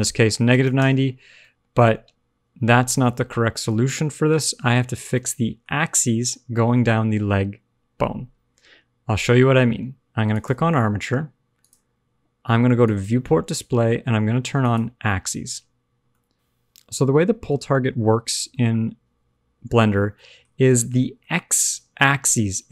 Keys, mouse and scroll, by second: 1.4 middle click, 4.3-4.6 scroll up 1, 4.6 scroll down 1, 4.9 shift+middle click, 7.4 middle click, 10.2 click, 11.5 click, 12.8 click, 13.3-14.6 scroll down 1, 14.6 click, 14.6-15.8 scroll down 1, 16.0 middle click, 16.3 click, 17.4 click, 18.7 shift+middle click, 18.7-19.8 shift+scroll up 2, 19.8-20.1 scroll down 3, 20.1 middle click, 20.4-21.1 scroll up 3, 20.7 shift+middle click, 21.1 middle click.